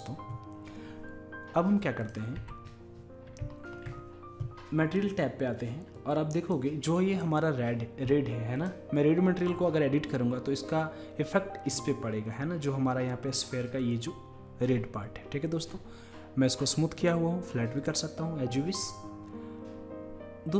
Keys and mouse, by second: 0.0-10.4 drag, 17.0-19.7 drag.